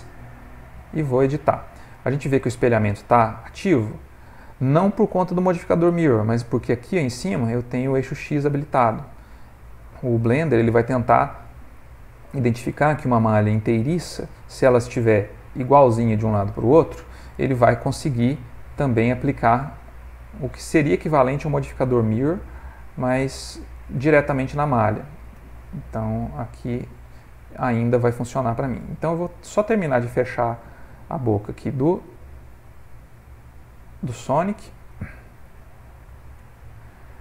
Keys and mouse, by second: 8.8 click, 10.1 click, 17.8 g, 20.8 middle click, 21.5 middle click, 23.1 click, 24.0 ctrl+middle click, 24.8 click, 25.8 g, 27.9 click, 28.4 g, 31.6 click, 32.2 g, 34.9 click, 36.6 click.